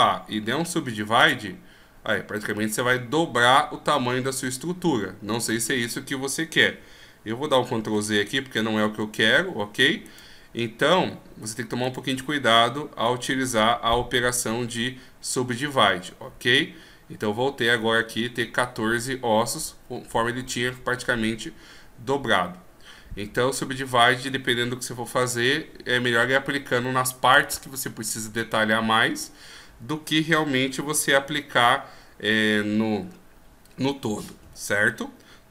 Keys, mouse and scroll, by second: 0.0 w, 7.9 ctrl+z, 10.0 right click, 11.8 right click, 22.6-23.9 scroll down 1, 23.9 right click.